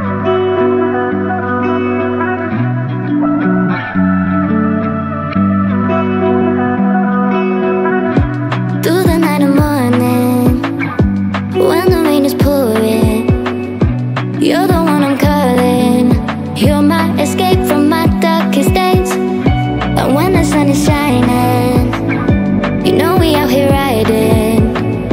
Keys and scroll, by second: 16.1-18.9 typing.